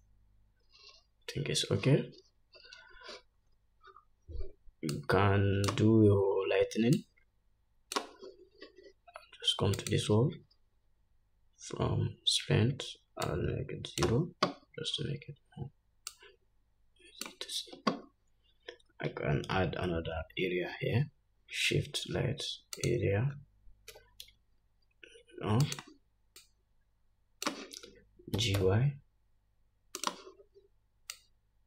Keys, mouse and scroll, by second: 2.8 scroll down 2, 3.9-4.4 scroll up 3, 4.7 scroll down 1, 13.8-26.2 drag, 18.8-20.0 scroll down 1, 20.7 shift+a, 24.4 g, 26.9-30.6 drag, 28.9 g.